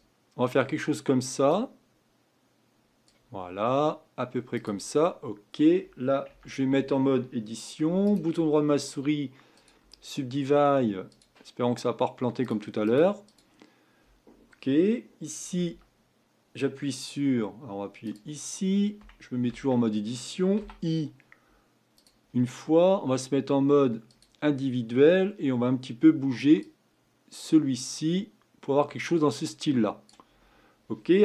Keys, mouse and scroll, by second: 1.5 click, 5.0-6.3 scroll up 5, 6.3 Tab, 8.1-11.1 right drag, 11.1-15.7 drag, 15.7 Tab, 18.0-19.5 drag, 19.5 Tab, 20.6 i, 24.1 click, 26.6-29.6 drag.